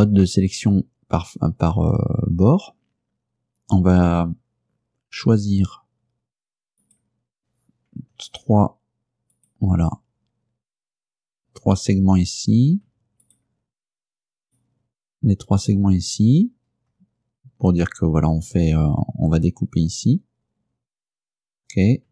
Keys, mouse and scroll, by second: 0.6 click, 6.9 right click, 8.4 shift+right click, 9.4 shift+right click, 13.3 shift+right click, 14.5 shift+right click, 15.7 shift+right click.